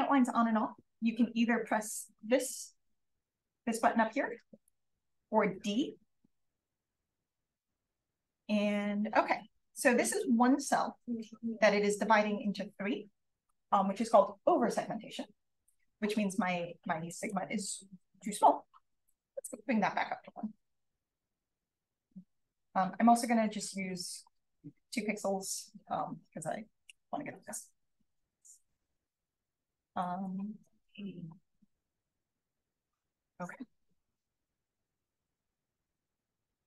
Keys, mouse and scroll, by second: 2.3 click, 2.9 click, 4.6 click, 5.1 click, 5.5 d, 6.1 d, 9.4 d, 17.1 click, 18.1 click, 19.0 1, 21.4 click, 23.0 BackSpace, 23.5 2, 25.4 click, 28.2-28.8 scroll down 2, 28.8-29.8 scroll up 2, 29.2 click, 29.9 click, 33.9 click.